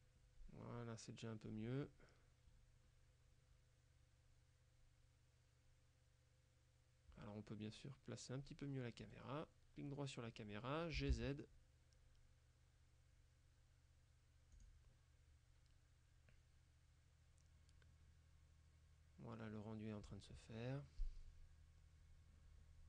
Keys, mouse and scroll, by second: 9.1 right click, 11.1 g, 11.2 z, 14.6 click.